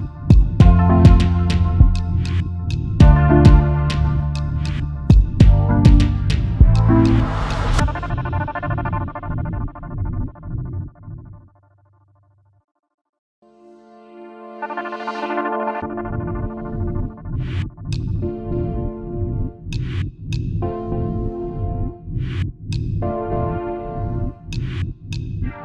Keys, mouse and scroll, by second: 1.3 space, 1.4 double click, 3.7 ctrl+g, 4.5 alt+scroll up 1, 10.9 ctrl+alt+3, 11.8-12.1 alt+scroll up 2, 12.1 space, 12.2 double click, 12.5 space, 15.7 alt+scroll down 1, 16.1 space, 16.2 double click, 16.5 space, 18.4 alt+shift+click, 19.9-20.2 alt+scroll down 1, 21.9 shift+click, 22.8 m, 23.8 alt+click, 24.9 alt+click.